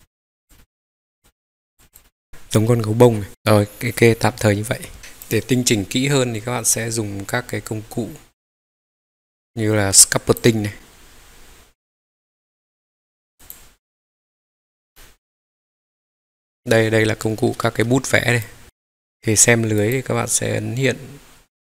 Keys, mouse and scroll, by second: 0.5 middle click, 1.2 click, 1.9 click, 1.9 scroll down 1, 2.0 middle click, 2.6 scroll up 2, 3.3-3.8 scroll down 2, 3.8-5.0 middle drag, 3.8-4.1 scroll down 1, 5.0 scroll down 1, 5.2 click, 5.7 scroll up 1, 6.0-6.7 scroll down 1, 6.7-8.0 middle drag, 6.7-7.3 scroll down 2.